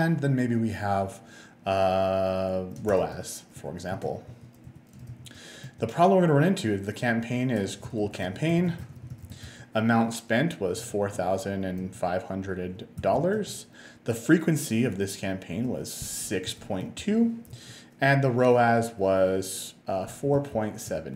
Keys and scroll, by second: 3.2 o, 3.6 BackSpace, 4.3 a, 4.7 BackSpace, 5.7 Return, 7.6-10.8 typing, 11.8 5, 13.0 0, 13.4 Tab, 16.3-17.6 typing, 19.9-20.9 typing.